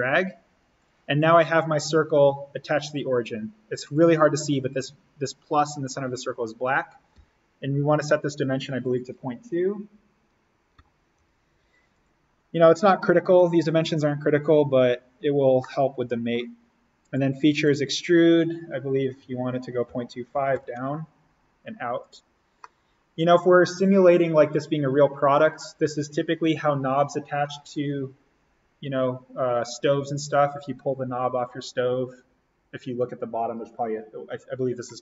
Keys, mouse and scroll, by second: 1.9 Escape, 7.1 d, 7.9 click, 10.9-11.6 typing, 11.9 click, 15.5-16.9 middle drag, 16.9 click, 19.6-21.0 typing, 21.9 click, 22.5 scroll up 1, 22.5-28.7 middle drag.